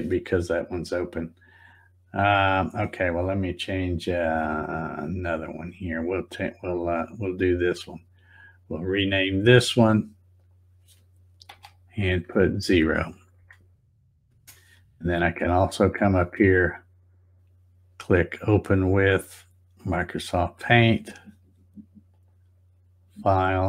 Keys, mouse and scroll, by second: 6.0 scroll down 1, 6.6 scroll up 1, 7.5 right click, 9.0 click, 10.3 click, 11.5 space, 15.9 right click, 19.9 click, 22.1 click, 23.3 click.